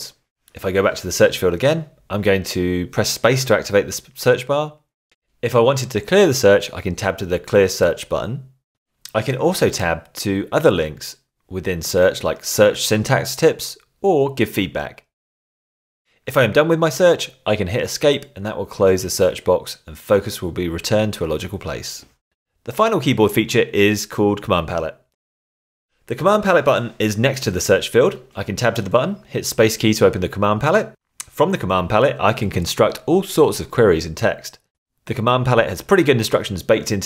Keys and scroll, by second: 1.4 space, 4.9 Tab, 12.7 Tab, 14.2 Tab, 18.5 Escape, 20.7 Tab, 21.5 shift+Tab, 29.8 space, 31.4-35.8 typing, 36.4 Tab.